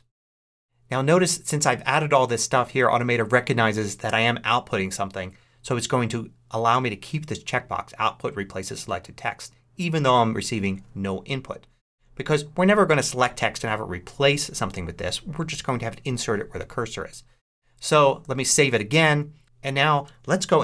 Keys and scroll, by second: 18.4 super+s.